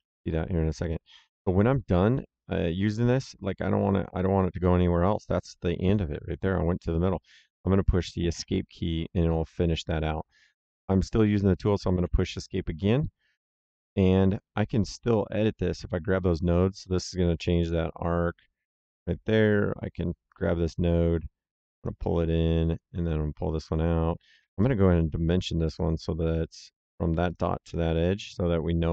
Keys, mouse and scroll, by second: 8.2 Escape, 11.9 Escape, 13.6 middle click, 14.9 click, 20.2 click, 22.9 click, 24.3 d, 24.5 middle click, 25.6 click, 27.2 click.